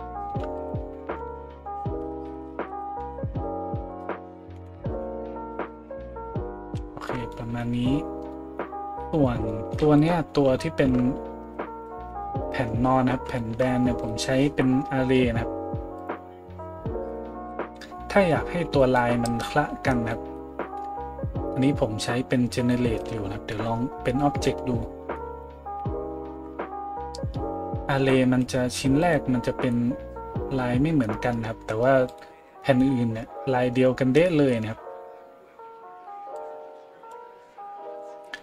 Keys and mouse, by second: 10.0 right click, 12.1 a, 14.0 middle click, 14.0 right click, 16.0-29.0 middle drag, 26.2 a, 29.0 right click, 29.1-32.1 middle drag, 32.1 right click, 32.2-36.4 middle drag, 36.4-38.4 drag.